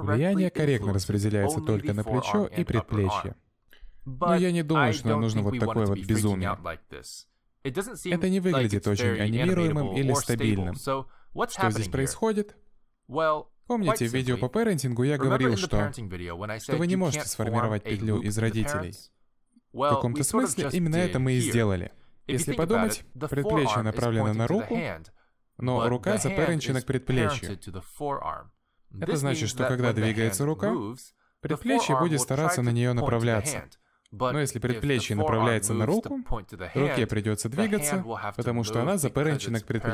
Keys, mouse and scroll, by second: 16.0 middle click, 17.2 ctrl+z, 17.9 shift+middle click, 18.5 middle click, 21.1 click, 21.7 middle click, 24.1 middle click, 25.9 g.